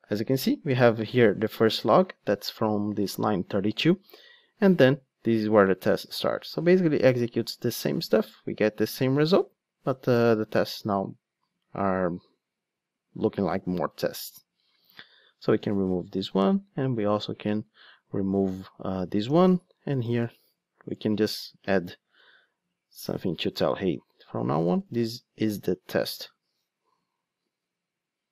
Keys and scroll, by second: 15.5 super+x, 19.2 Tab, 21.0 Return, 26.0 ctrl+d.